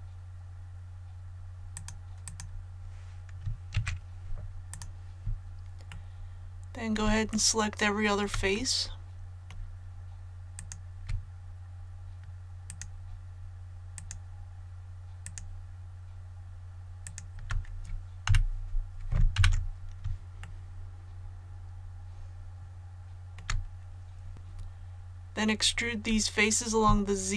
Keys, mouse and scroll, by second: 1.7 click, 3.7 Tab, 4.7 click, 5.9 middle click, 6.2 scroll up 1, 7.3 shift+middle click, 8.5-10.4 middle drag, 10.5 right click, 13.9 shift+right click, 15.2 shift+right click, 17.0 shift+right click, 18.2 KP_1, 19.3 KP_1, 20.4-23.3 shift+middle drag, 24.3 ctrl+z.